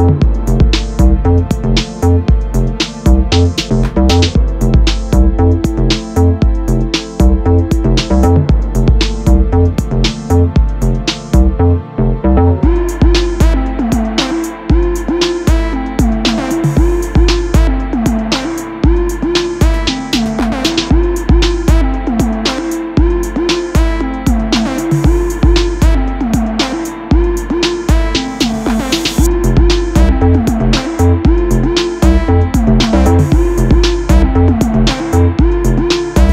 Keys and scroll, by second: 0.5 g, 4.3 ctrl+t, 9.6 Return, 12.4 space, 15.3 Up, 15.7 Left, 16.9 Down, 17.3 Left, 19.5 Down, 20.3 Right, 23.3 Right, 25.3 Right.